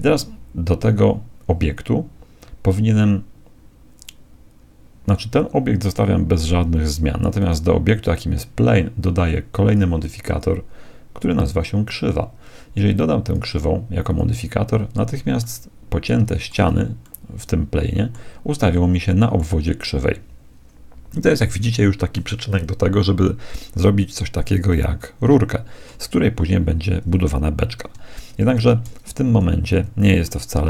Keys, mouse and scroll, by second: 7.4-9.1 right drag, 9.7-12.2 drag, 13.2-15.0 drag, 15.4-20.5 middle drag, 16.7 z, 24.7-26.7 middle drag, 27.9 Tab, 28.7 Tab, 29.3 z, 30.3-30.6 middle drag.